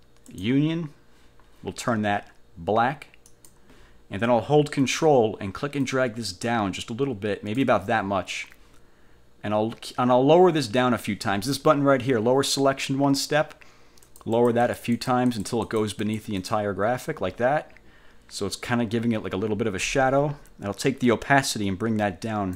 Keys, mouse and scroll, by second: 0.4 click, 3.4 click, 6.0-7.9 ctrl+drag, 14.2-15.7 drag, 15.8 click, 16.5 click, 21.8 click.